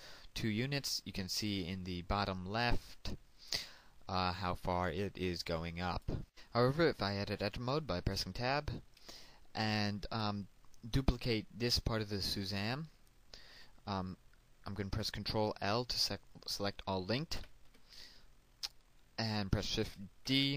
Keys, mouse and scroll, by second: 6.2 click, 8.1 Tab, 9.1 shift+middle click, 17.2 ctrl+l, 20.1 shift+d.